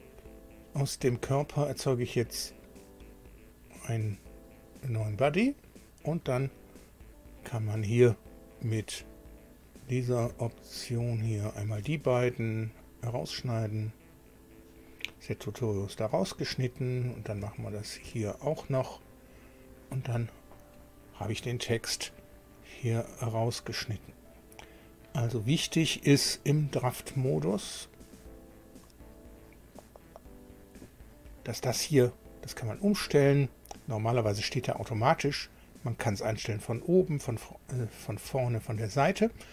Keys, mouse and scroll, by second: 0.7 click, 2.0 click, 3.6 scroll down 1, 4.6 click, 11.2 ctrl+click, 12.7 click, 17.0 click, 17.7 ctrl+click, 19.4 click, 22.4-22.7 scroll up 1, 23.0-25.2 middle drag, 25.5 middle click, 28.2 click, 30.1 click, 32.8 click.